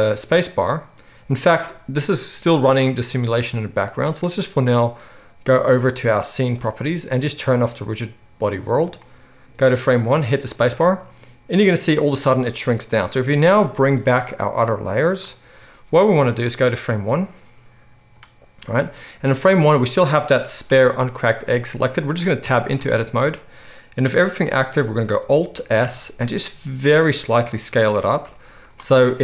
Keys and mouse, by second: 1.5 space, 6.8-7.7 middle drag, 7.7 click, 8.1-9.6 middle drag, 9.6-14.7 drag, 10.5 space, 12.7 space, 14.7 middle click, 15.0 click, 15.1-16.4 middle drag, 16.4-28.1 drag, 20.6 g, 22.4 Tab, 25.5 alt+s, 28.1-29.2 shift+middle drag, 28.4 z.